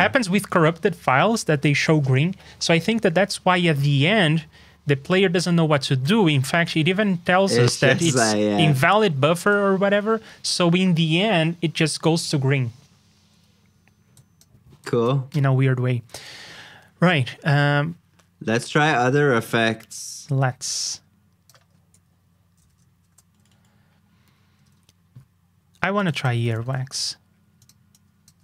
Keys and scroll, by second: 9.8 super+Tab, 22.1 alt+shift+Down, 23.0 super+j, 24.6 super+Tab, 26.4 super+c, 26.6 super+Tab.